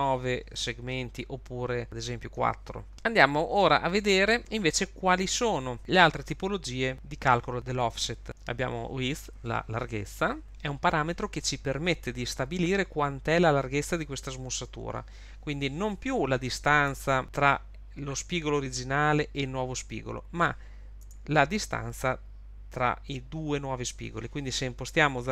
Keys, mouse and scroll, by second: 0.5 click, 3.9 click, 7.8 click, 16.9 Tab, 21.0 Tab.